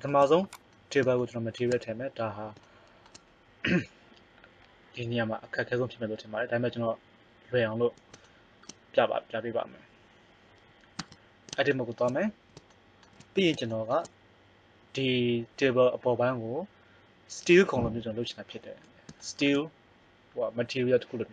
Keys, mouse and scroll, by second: 0.4 right click, 1.2 middle click, 1.4 middle click, 11.0 Tab.